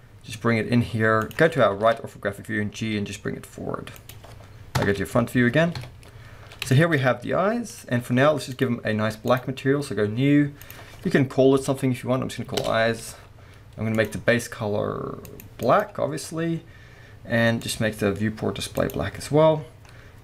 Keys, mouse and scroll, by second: 1.3 click, 1.8 KP_3, 2.8 g, 4.1 click, 4.8 KP_0, 6.3 scroll up 2, 6.4-7.8 middle drag, 7.3 g, 7.8 click, 8.6 click, 9.2-14.1 drag, 12.7 Return, 16.2-17.6 scroll down 1, 17.6 click, 19.6-20.2 scroll up 1.